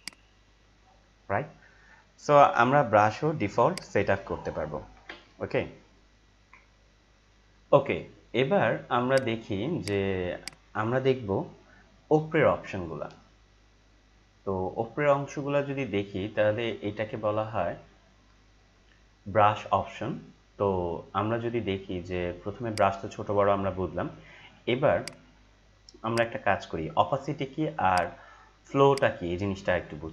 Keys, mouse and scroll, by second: 1.7 ctrl+Delete, 3.7 click, 4.9 ctrl+Delete, 7.3 ctrl+m, 9.1 click, 14.7 click, 18.4 ctrl+Num_Lock, 18.4 click, 18.8 ctrl+m, 18.8 click, 20.4 click, 22.7 click, 25.0 right click, 28.9-30.1 drag.